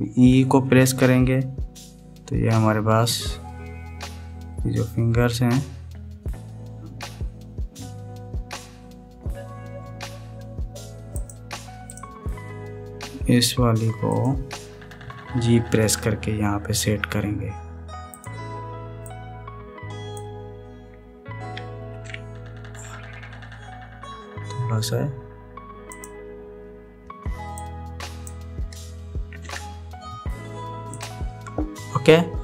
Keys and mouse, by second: 1.5 e, 14.8 click, 16.6 g, 19.8-21.0 drag, 22.7 ctrl+a, 28.3 click, 30.1 ctrl+a.